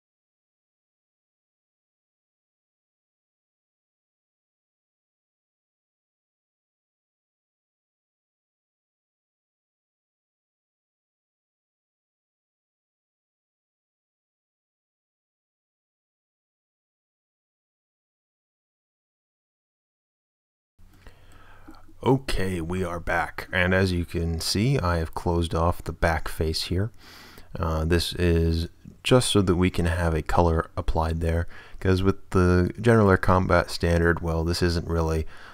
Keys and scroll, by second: 0.3 shift+f, 0.9 shift+f, 1.4 shift+f, 2.5 shift+f, 5.0-7.2 typing, 7.5 super+a, 8.8-13.6 typing, 14.6 shift+super+f, 16.7 shift+a, 18.3-20.0 typing.